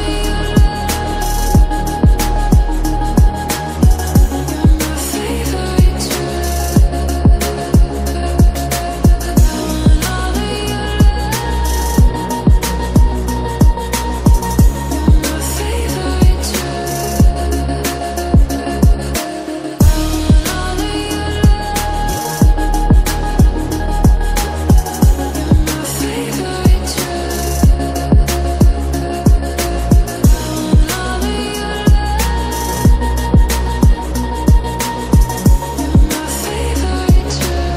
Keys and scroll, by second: 16.6 ctrl+z, 19.8 ctrl+t, 27.8 Delete, 34.1 typing, 35.8-37.0 typing.